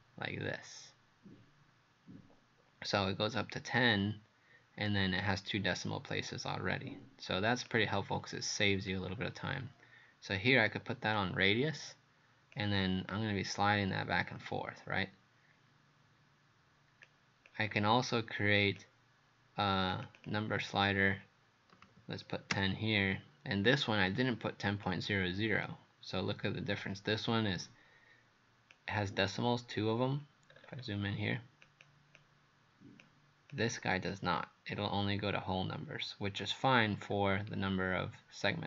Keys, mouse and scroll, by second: 20.2 click, 21.8 KP_1, 21.8 KP_0, 22.5 Return, 24.1 click, 30.5-31.7 scroll up 4, 31.7 click, 32.2 click, 33.5 click, 34.1 click, 37.1-37.8 scroll down 1.